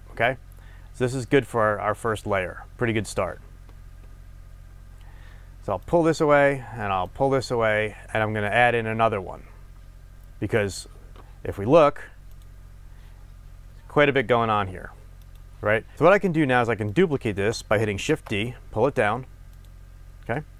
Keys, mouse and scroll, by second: 4.4-5.8 scroll down 2, 7.0 click, 15.9 click, 16.9 drag, 17.2 shift+click, 18.1 shift+d, 19.6 click, 20.2-20.5 middle drag.